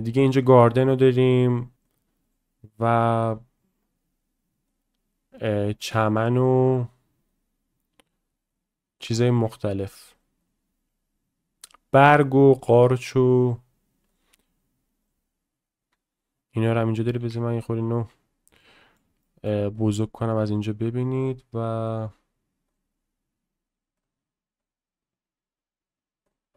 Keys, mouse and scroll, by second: 16.7 click, 18.6-18.9 shift+middle drag, 19.2 middle click, 19.7 click, 21.2-26.5 drag.